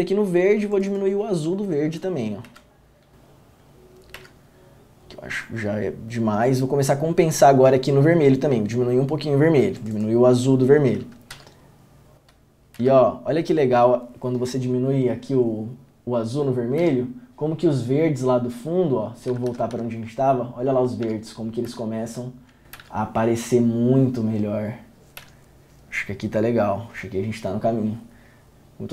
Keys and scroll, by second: 2.6 Down, 4.3 Down, 11.5 Down, 12.9 Down, 16.9 Down, 19.4 Down, 19.6 Up, 19.9 Up, 21.2 Down, 21.8 Down, 22.9 Down, 25.3 Down.